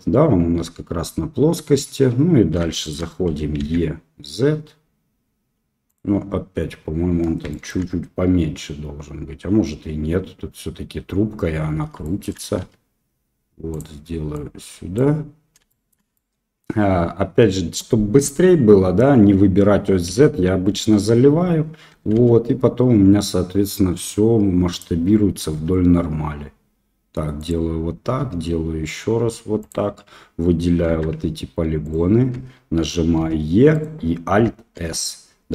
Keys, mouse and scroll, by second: 1.7 Tab, 2.7 shift+middle click, 3.2 e, 7.4 shift+middle click, 12.0 shift+middle click, 12.6 s, 14.3 click, 15.6 shift+middle click, 16.1-16.6 middle drag, 20.0 f, 21.9 e, 25.5 e, 28.0 e, 30.8 3, 31.8 alt+click, 33.1 e, 34.7 alt+s.